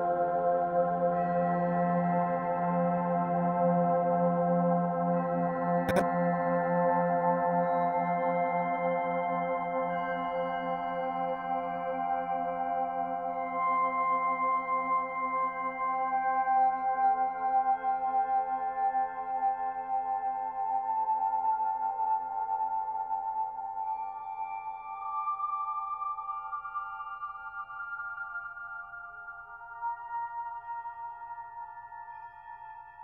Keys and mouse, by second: 0.1-1.1 drag, 1.4 ctrl+s, 2.8-4.3 drag, 4.8-6.2 drag, 9.6 click, 10.8 click, 12.3-13.7 drag, 14.2 click, 15.9-17.7 drag, 18.2-19.5 drag, 21.2-22.6 drag, 24.2 click, 27.1-28.3 drag, 29.0-29.8 drag, 30.7-31.4 drag, 32.8-33.0 drag.